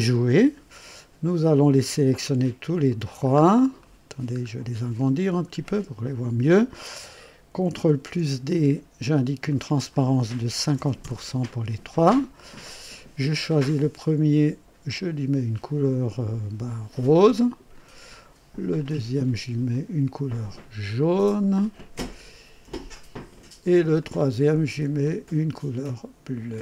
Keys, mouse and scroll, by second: 0.1 click, 2.2 ctrl+click, 2.8 ctrl+click, 3.3 ctrl+scroll up 1, 3.8 ctrl+right click, 4.4 scroll up 1, 5.5 scroll up 1, 6.0-6.8 right drag, 7.9 ctrl+d, 9.4 click, 10.5 KP_5, 10.7 KP_0, 11.0 Return, 12.4 click, 13.5 click, 14.9 click, 16.6 click, 17.6 click, 18.7 click, 19.6 click, 20.9 click, 23.1 click, 23.9 click, 24.9 click, 26.4 click.